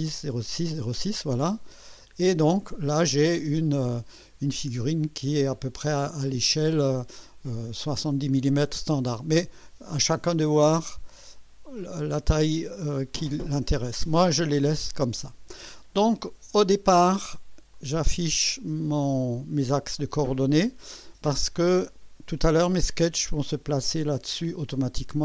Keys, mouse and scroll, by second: 2.6 click, 3.6 scroll up 1, 4.5-5.2 right drag, 10.9 click, 11.9-12.2 scroll down 1, 12.6 scroll up 1, 13.1-13.9 right drag, 17.7 click, 20.1 click, 21.7-22.4 right drag.